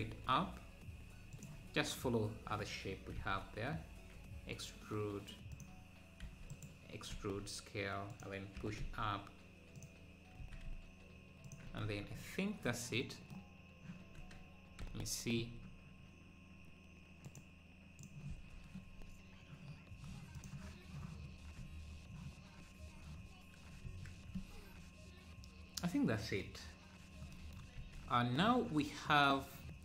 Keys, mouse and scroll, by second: 0.0 s, 6.2 e, 7.1 s, 8.6 g, 10.4 e, 11.7 Tab, 12.0 scroll down 1, 14.8 Tab, 18.0-23.3 drag, 21.0 n, 23.3 scroll down 1.